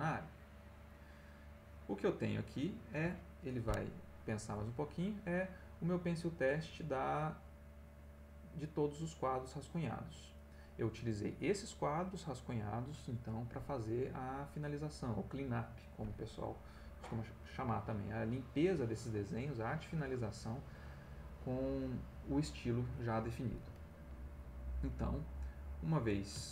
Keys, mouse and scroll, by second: 2.6 click, 24.6 click.